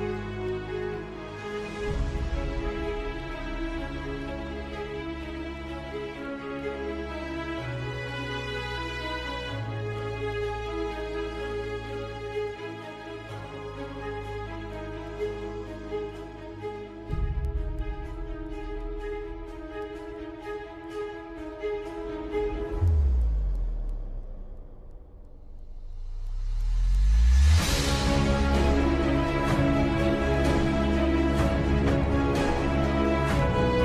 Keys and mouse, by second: 0.6 g, 5.1 r, 8.3 g, 11.5 middle click, 12.6-13.6 middle drag, 14.4-15.4 middle drag, 15.9-17.3 middle drag, 17.7-19.9 middle drag, 20.2 shift+middle click, 22.0 middle click, 22.9 middle click, 24.1 middle click, 26.5-28.3 middle drag, 28.6 middle click, 29.6-31.7 middle drag, 32.4 middle click.